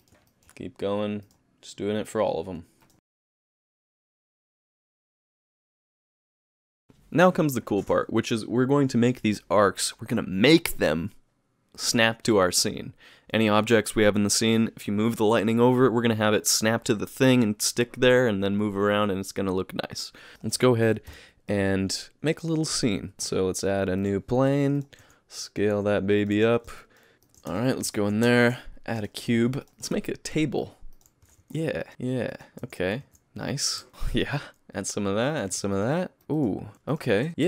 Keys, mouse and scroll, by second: 0.0 click, 0.3 middle click, 1.3 click, 2.9 click, 3.0 i, 3.1-4.0 click, 3.2 click, 3.2 x, 3.2 click, 3.3 click, 4.1 click, 4.2 click, 4.3 click, 4.5 click, 4.5 i, 4.6-5.7 click, 4.8 click, 4.9 click, 5.7 x, 5.7 middle click, 5.8 click, 5.9 click, 6.0 i, 6.1 click, 6.1 click, 6.3 click, 6.5 click, 6.6 click, 6.6 click, 6.8 click, 6.8 ctrl+s, 6.8 click, 20.4 shift+middle click, 21.1 KP_3, 21.6 KP_1, 23.1 click, 23.1 shift+middle click, 23.1 space, 23.1 shift+a, 24.4 g, 25.0 s, 25.8 g, 26.3 s, 26.8 middle click, 27.2 shift+middle click, 27.5 Tab, 28.0 alt+a, 29.3 g, 29.7 shift+middle click, 29.7 g, 29.9 s, 31.2 s, 31.9 s, 32.6 s, 33.9 shift+middle click, 34.0 ctrl+r, 34.6 ctrl+r, 35.5 ctrl+r, 36.2 ctrl+r, 36.2 click, 36.7 ctrl+r.